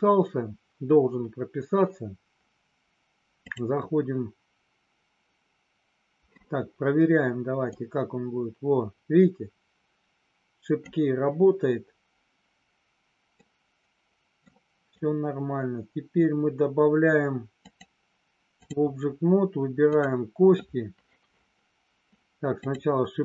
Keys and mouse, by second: 3.5-6.3 drag, 7.9-10.9 drag, 13.3-14.4 middle drag, 17.6-18.7 drag, 19.9 click, 22.6 click.